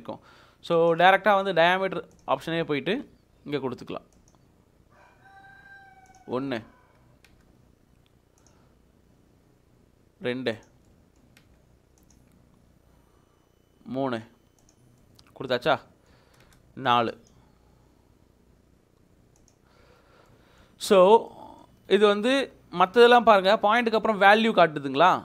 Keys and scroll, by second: 7.3 space, 11.4 space, 16.4 space.